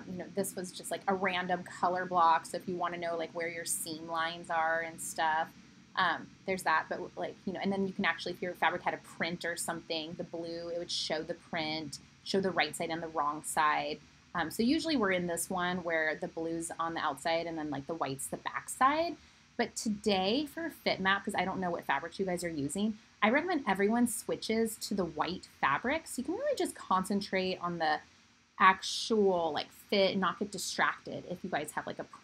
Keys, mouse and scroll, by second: 3.5-32.2 middle drag.